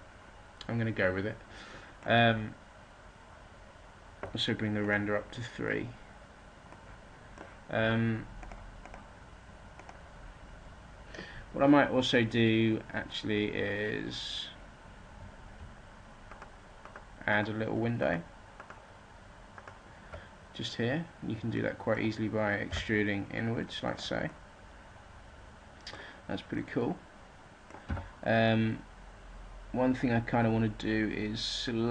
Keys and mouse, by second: 6.1-7.3 middle drag, 8.4 middle click, 9.8-11.4 middle drag, 16.2-19.4 middle drag, 22.1 right click, 22.6 e, 23.9 right click, 24.2-25.7 drag, 27.8 z, 31.2-31.9 drag.